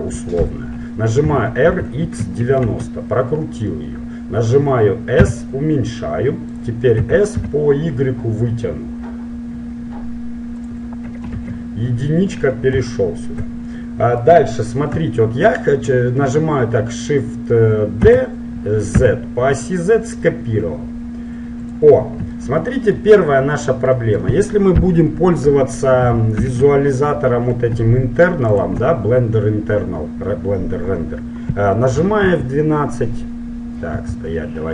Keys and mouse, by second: 1.4 r, 5.4 s, 6.8-8.6 drag, 7.2 s, 11.4 KP_1, 12.2-18.1 middle drag, 18.1 shift+d, 22.5-25.7 middle drag, 26.1-30.6 drag.